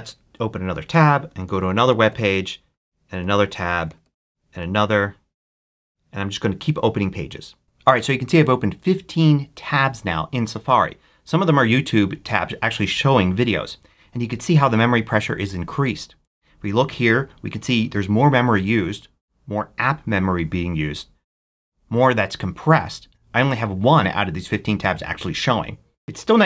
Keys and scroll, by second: 0.3 super+t, 0.9 super+a, 1.0-2.0 typing, 2.3 super+Return, 2.8 super+t, 3.2-4.3 typing, 5.1 super+t.